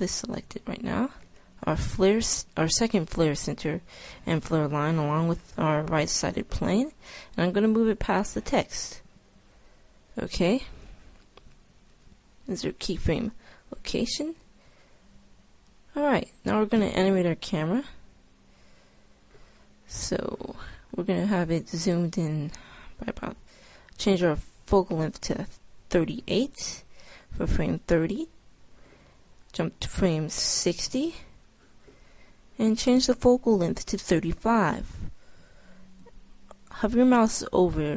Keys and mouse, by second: 1.3 middle click, 1.5-3.1 right drag, 3.1 click, 6.4 middle click, 9.9 right click, 11.8 i, 17.3 middle click, 18.2 click, 20.4-21.9 right drag, 21.9-23.1 middle drag, 23.1-24.6 right drag, 28.8 i, 35.8 i.